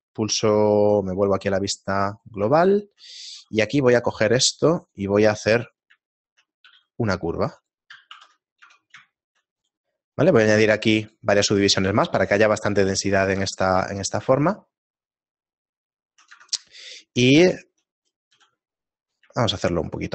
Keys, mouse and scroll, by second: 0.8 KP_Divide, 2.2 right click, 2.2 scroll down 6, 2.4 Tab, 2.9 shift+middle click, 3.5 ctrl+r, 4.4 ctrl+r, 5.7 right click, 6.1 shift+middle click, 7.1 g, 8.2 ctrl+2, 8.6 Tab, 9.2 shift+middle click, 9.6 right click, 11.0 click, 11.3 click, 12.0 shift+middle click, 13.3 Tab, 13.9 shift+middle click, 16.3 Tab, 16.8 shift+middle click, 18.0 shift+middle click, 18.0 right click, 18.4 s, 19.4 shift+middle click.